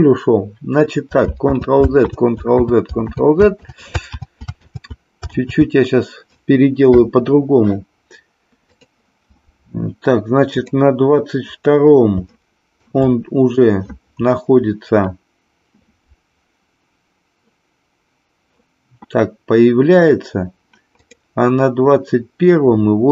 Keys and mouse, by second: 1.7 ctrl+z, 2.2 ctrl+z, 2.7 ctrl+z, 3.3 ctrl+z, 3.7 ctrl+z, 4.8 ctrl+z, 5.5 ctrl+z, 8.7 click, 10.6 click, 12.3-12.8 shift+middle drag, 21.0 click.